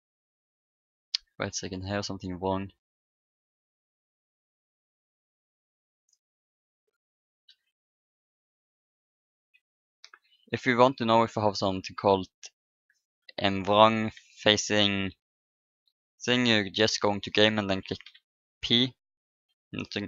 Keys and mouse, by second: 0.1-2.5 drag, 3.3-4.8 drag, 5.7-6.7 drag, 6.3-7.9 middle drag, 7.4 p, 9.5 KP_1, 18.9 p.